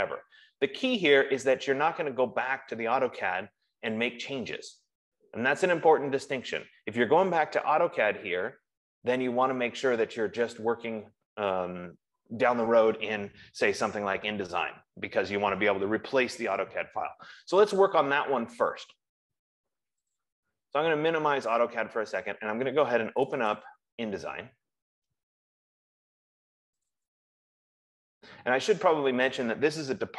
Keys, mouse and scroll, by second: 21.1 click, 23.6 click, 24.0 click, 27.2 click, 27.6 click.